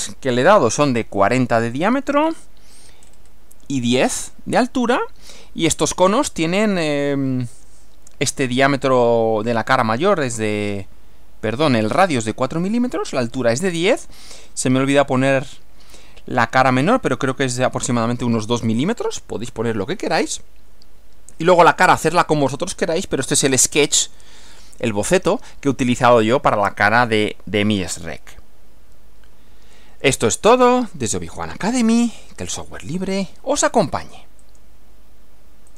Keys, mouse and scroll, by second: 3.0-3.4 scroll up 1, 21.3 Right, 34.4 click, 35.7 click.